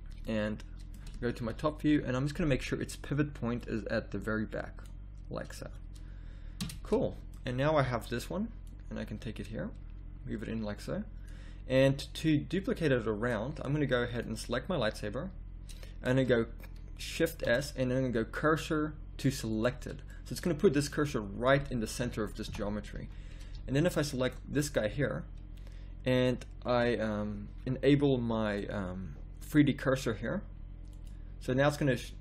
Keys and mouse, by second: 1.4 KP_7, 1.8 z, 2.2 middle click, 3.6 middle click, 6.6 Tab, 7.8 z, 8.6-9.8 drag, 14.1-17.5 drag, 17.5 shift+s, 22.0 KP_1, 22.5 KP_3, 22.9 z, 23.5 z, 24.9 z.